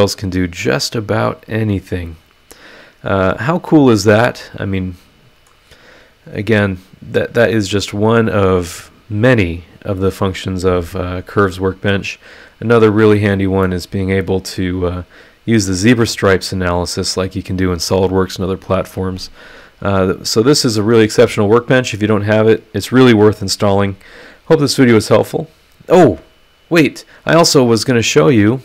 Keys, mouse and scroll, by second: 6.1 scroll up 1, 7.6 click, 11.7 click, 12.6 click, 13.6-20.8 middle drag, 13.7-20.8 right drag.